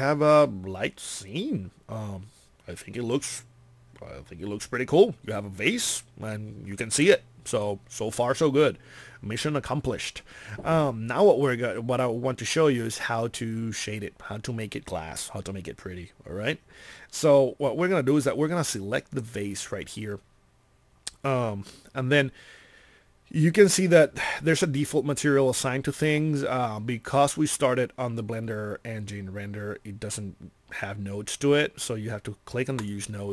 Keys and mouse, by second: 20.1 click.